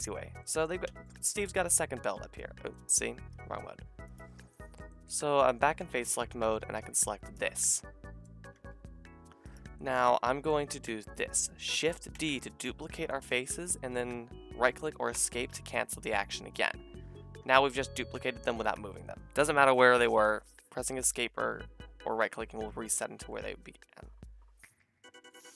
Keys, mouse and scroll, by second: 3.3-4.4 drag, 3.3 a, 4.8-5.8 middle drag, 5.8 click, 8.5 g, 12.1 shift+d, 13.6 middle click, 17.4 g, 24.8 g.